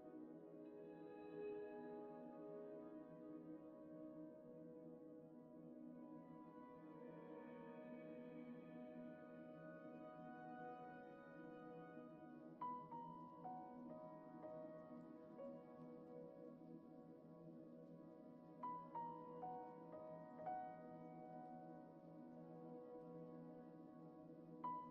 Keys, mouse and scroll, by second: 0.3 r, 1.9 r, 9.0 ctrl+s, 10.5 r, 14.2 click, 15.6 click, 16.2 click, 16.5 click, 17.2-18.5 drag, 19.5 click, 20.4 click, 21.9 click, 22.1 ctrl+s, 22.5 click, 23.1 click.